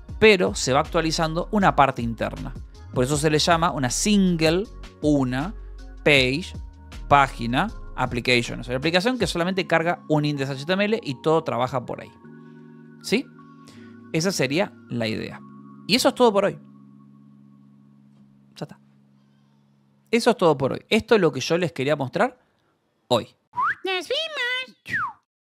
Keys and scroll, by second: 0.0 j, 1.1 k, 1.8 shift+v, 3.1 d, 3.3 Escape, 4.3 ctrl+s, 6.6-8.3 typing, 8.4 Escape.